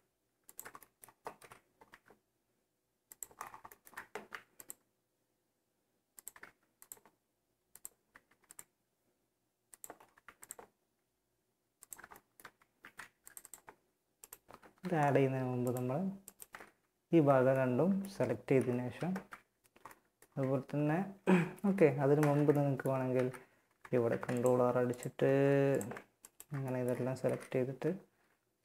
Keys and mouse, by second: 0.5 KP_1, 1.1 e, 3.5 ctrl+r, 5.6 ctrl+r, 7.5 ctrl+r, 9.5 ctrl+r, 12.0 ctrl+r, 12.9 s, 13.8 ctrl+z, 15.8 z, 16.1 click, 16.3 z, 17.7 KP_1, 18.0 z, 20.8 KP_1, 21.3 ctrl+z, 22.3 z, 23.2 ctrl+r, 24.4 ctrl+Tab, 25.5 click, 26.5 KP_1, 26.8 click, 27.4 e, 28.1 z, 28.5 z.